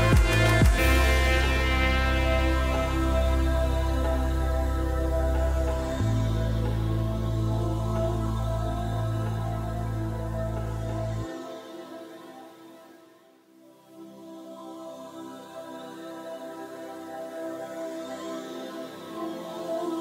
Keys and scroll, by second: 6.6-7.4 typing, 13.3 Tab, 15.7 s.